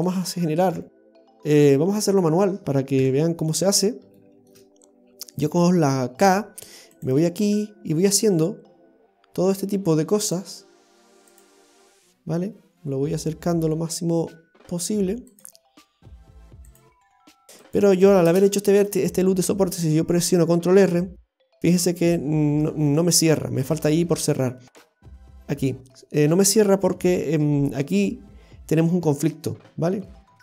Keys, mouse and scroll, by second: 1.9-2.2 scroll down 1, 2.2 middle click, 3.0 KP_7, 3.7-4.2 scroll up 2, 4.2 shift+middle click, 6.2 k, 20.8 ctrl+r, 29.5-30.0 scroll up 1, 30.0-30.4 scroll down 1.